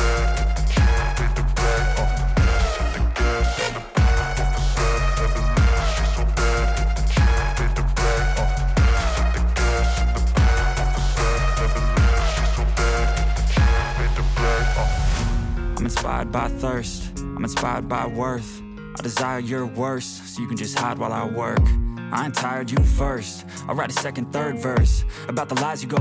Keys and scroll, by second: 5.0 alt+F3.